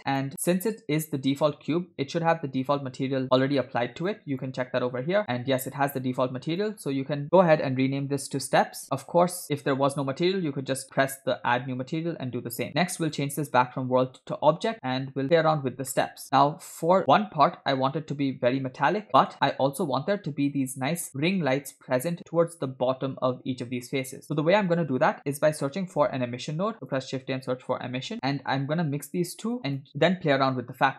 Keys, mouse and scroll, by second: 0.1 click, 4.0 click, 4.3 click, 5.2-6.1 scroll up 6, 6.5-9.0 drag, 13.0-14.3 drag, 14.8-15.2 scroll down 2, 16.0 middle click, 16.7 click, 17.8 middle click, 18.8 click, 19.3 middle click, 19.7-20.5 scroll up 1, 20.5 scroll up 1, 24.2 click, 26.3 shift+a, 29.6 click.